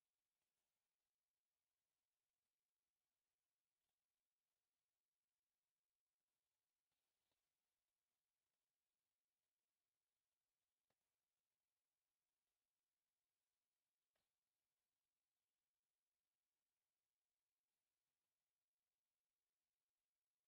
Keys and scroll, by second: 9.7 Escape, 10.1 f, 10.2 space, 10.7 e, 10.9 space, 11.3 Escape, 13.9 Escape, 15.8 F8, 17.8 Escape, 19.7 space.